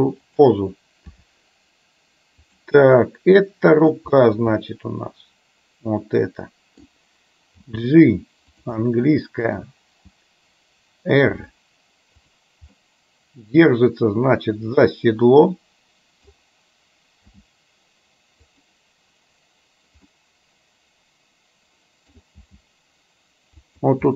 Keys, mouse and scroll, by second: 1.2 r, 3.1 middle click, 4.6-7.0 middle drag, 7.6 g, 8.9-9.6 middle drag, 11.4 r, 12.9-16.4 middle drag, 17.4 g, 20.2-22.1 middle drag, 22.4 g.